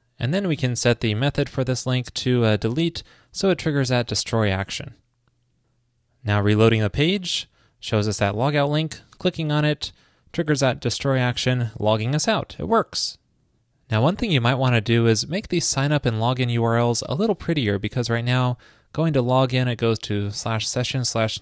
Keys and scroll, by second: 3.4 super+s.